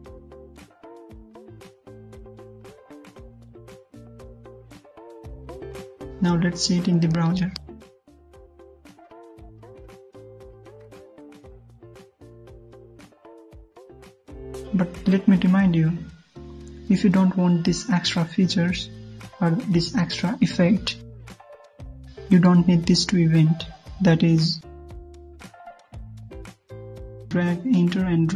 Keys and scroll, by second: 3.5 ctrl+s, 6.8 alt+Tab, 7.1 ctrl+F5, 25.0 alt+Tab.